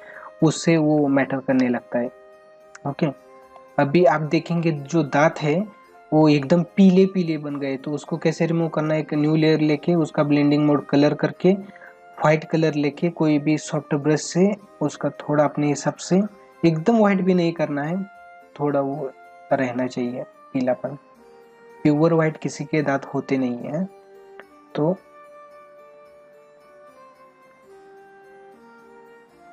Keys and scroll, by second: 0.8 space, 3.4 space.